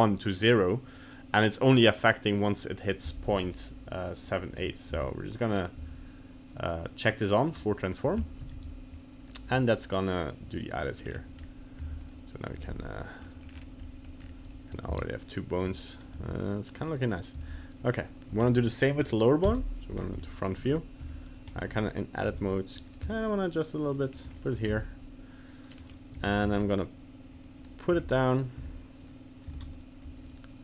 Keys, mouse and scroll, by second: 4.1 click, 5.0 g, 5.8 g, 7.6 middle click, 8.2 shift+middle click, 8.4 shift+middle click, 8.5 g, 11.1 scroll down 3, 11.4-11.9 scroll up 2, 11.9 g, 12.5 right click, 12.6 g, 13.2 middle click, 13.5 scroll down 5, 13.8 middle click, 14.2 scroll up 4, 15.1 ctrl+z, 15.9 right click, 16.2 g, 17.4 g, 18.1 right click, 18.4-18.8 scroll up 3, 18.8 middle click, 19.0 middle click, 19.4 KP_1, 20.0 scroll up 2, 20.2 shift+middle click, 20.6 scroll up 2, 21.1 g, 21.6 Tab, 22.2 g, 24.1 scroll down 1, 24.4 shift+middle click, 24.8 Tab, 25.7-26.1 scroll down 3, 26.1 g, 28.0 Tab, 28.7 Tab, 29.0 right click, 29.6 ctrl+Tab, 29.8 right click.